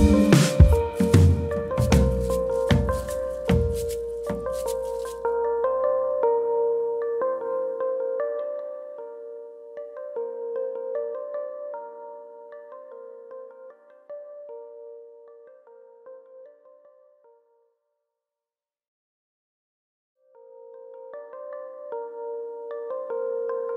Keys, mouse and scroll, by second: 4.5 ctrl+shift+s, 4.5 middle click, 5.6-6.1 scroll up 2, 6.2-6.5 scroll down 1, 6.5 middle click, 8.9 KP_3, 9.7 click, 10.8 click, 14.1 shift+click, 14.4 scroll down 1, 14.7 middle click, 16.5 ctrl+j, 19.7 KP_3, 20.5-21.0 scroll up 2, 20.8 middle click, 21.3 click, 21.6 Tab, 21.8 scroll up 2, 22.0 middle click, 23.1-23.4 scroll down 2, 23.4 middle click.